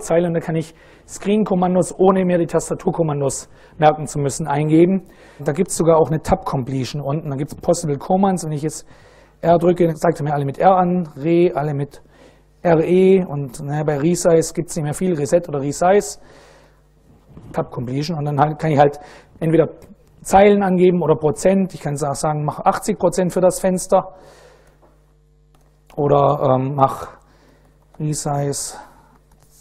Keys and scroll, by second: 5.4 Tab, 8.7 r, 9.2 Tab, 10.4 e, 10.9 Tab, 13.1 s, 13.4 Tab, 16.2 i, 16.5 Tab, 22.2 8, 22.5 0, 23.5 shift+5, 25.2 Return, 26.0 ctrl+a, 26.5-29.5 typing.